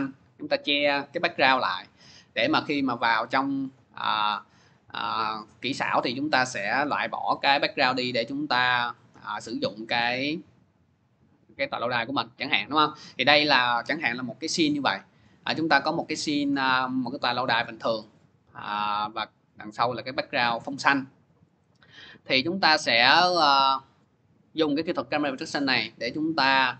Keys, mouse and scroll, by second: 17.0-22.1 drag, 22.3-25.3 drag.